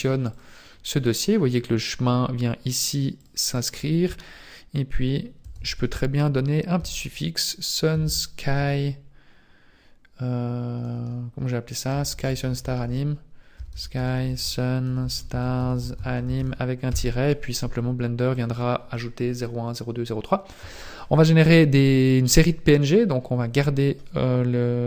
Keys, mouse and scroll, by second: 0.4 click, 3.2 click, 12.1 BackSpace, 12.2 BackSpace, 12.6 BackSpace, 12.8 BackSpace, 24.3-24.8 scroll up 3.